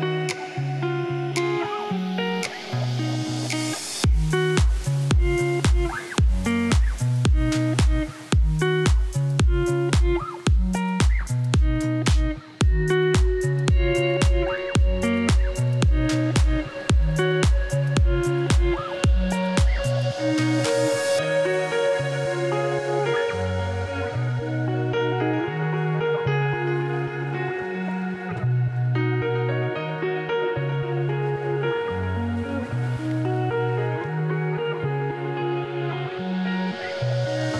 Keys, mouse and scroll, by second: 0.1 click, 0.2 g, 1.2 click, 1.3 g, 2.8 click, 2.9 Tab, 3.0 click, 3.2 Tab, 3.7 g, 6.6 Tab, 6.9 Tab, 7.1 click, 7.2 click, 7.6 g, 9.2 Tab, 9.9 shift+d, 12.2 click, 17.4 Tab, 17.7 click, 18.4 g, 18.9 click, 19.0 g, 22.7 Tab, 23.1 click, 24.9 shift+d, 27.3 click, 27.8 shift+d, 29.8 r, 32.7 Tab, 33.5 Tab, 33.7 click, 33.7 Tab, 34.0 Tab, 34.2 click, 34.5 Tab, 34.6 1, 35.3 click, 36.1 z, 36.6 Tab, 36.9 click, 37.3 click.